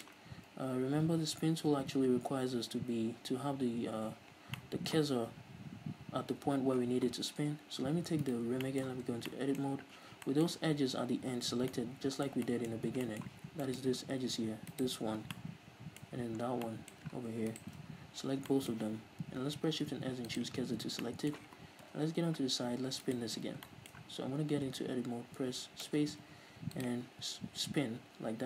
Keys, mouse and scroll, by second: 2.9 ctrl+z, 4.6-8.3 middle drag, 8.3 right click, 8.8-14.8 middle drag, 9.1 Tab, 10.0 z, 12.8-13.1 scroll up 2, 13.4 z, 13.9-14.8 scroll up 2, 14.8 alt+right click, 15.4-17.6 middle drag, 16.3-16.7 scroll up 2, 17.6 alt+shift+right click, 17.9-18.3 scroll down 2, 18.3 z, 18.6-23.2 middle drag, 18.9 z, 19.8 shift+s, 20.7 scroll down 2, 21.0 Tab, 21.9 KP_3, 23.2 right click, 23.5 z, 23.7-26.0 shift+middle drag, 24.5 Tab, 26.0 space.